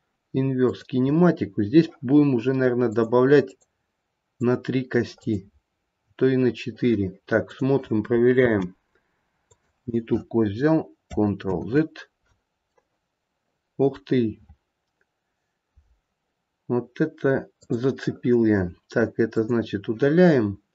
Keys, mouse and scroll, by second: 3.1 click, 3.6 click, 5.3 click, 8.5 g, 11.8 ctrl+z, 12.8 middle click, 14.0 middle click, 17.7 click, 19.4 click.